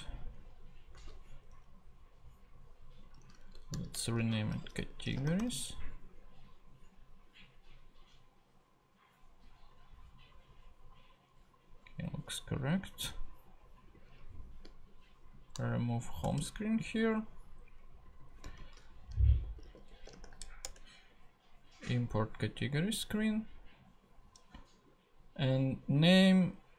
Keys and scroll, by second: 1.0 super+v, 3.5-5.9 typing, 15.7 shift+BackSpace, 18.6-20.6 typing.